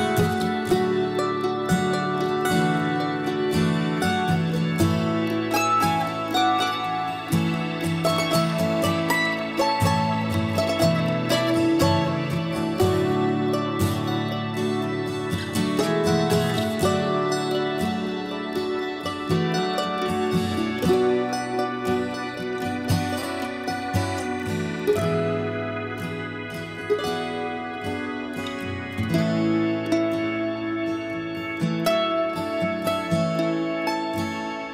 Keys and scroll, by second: 3.3 Escape, 3.8 b, 4.6 Escape, 8.1 ctrl+h, 8.7 ctrl+h, 9.2 ctrl+h, 11.3 ctrl+h, 21.5 b, 24.2 Escape, 24.8 b, 26.9 Escape, 27.0 Escape, 27.2 Escape, 27.7 b, 28.0 Escape, 28.7 ctrl+h, 29.2 b, 29.5 Escape, 30.8 ctrl+h, 31.2 b, 31.6 Escape, 31.8 Escape, 32.0 Escape.